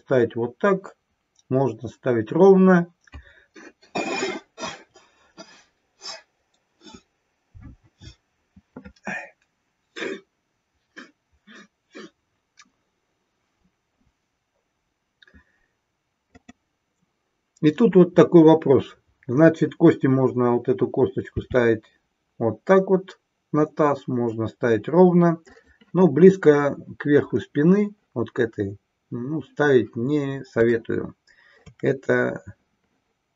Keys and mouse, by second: 16.3 click, 25.5 click, 30.7-31.7 shift+middle drag.